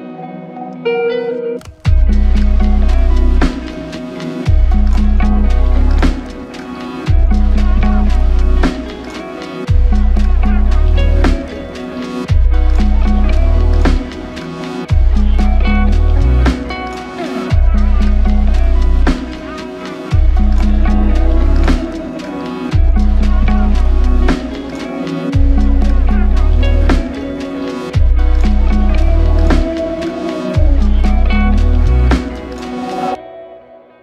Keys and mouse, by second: 1.9-2.7 typing, 4.1 double click, 32.2 ctrl+click.